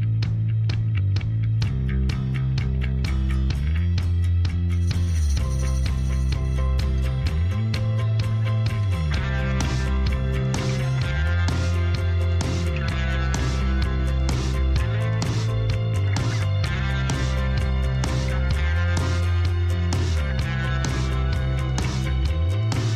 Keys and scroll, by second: 3.2 g, 3.4 y, 12.5 g, 12.7 z, 18.9 a.